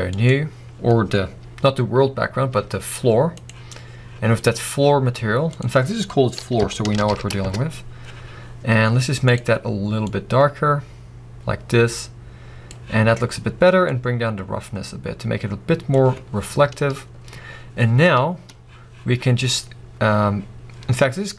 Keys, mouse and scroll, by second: 1.7-2.1 scroll down 1, 2.5 g, 3.6 right click, 4.2-4.8 scroll down 1, 7.5 o, 8.0 Return, 8.3 scroll up 1, 9.5 click, 13.9-15.7 drag, 16.3 scroll up 1, 17.5-18.2 scroll down 1.